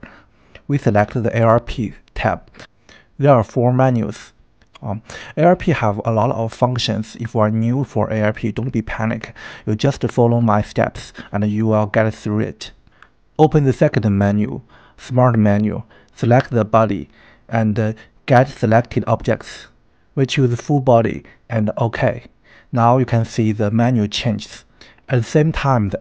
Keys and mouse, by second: 2.6 click, 5.9 click, 9.6 click, 11.3 click, 18.8-21.7 drag.